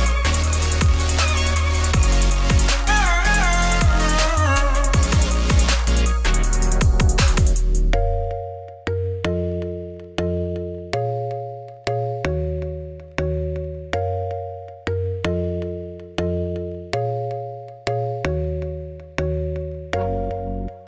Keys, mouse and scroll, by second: 0.1 Left, 0.3 ctrl+1, 0.9 middle click, 1.3 Tab, 1.7 scroll up 1, 1.9 ctrl+r, 2.5 ctrl+r, 3.4 Tab, 3.7 right click, 3.9 scroll down 3, 4.0-6.0 shift+middle drag, 6.0 click, 6.3 middle click, 7.1 click, 7.6-9.7 scroll up 1, 9.7-10.8 shift+drag, 12.9 click, 14.1 click, 14.9 click, 14.9 right click, 15.6 ctrl+1, 15.9 click, 16.6 shift+middle click, 16.8 scroll up 1, 17.3 right click, 17.5 Tab, 17.8 alt+Left, 18.9 alt+shift+Left, 19.2 ctrl+b.